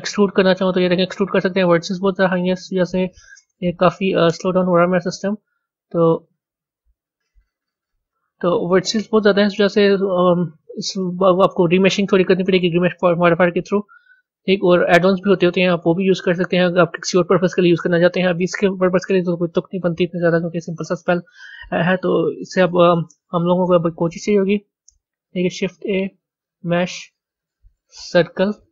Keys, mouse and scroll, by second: 7.1 ctrl+z, 7.5 ctrl+z, 9.4-12.5 middle drag, 12.9 click, 14.1 click, 22.4 click, 24.8 shift+a.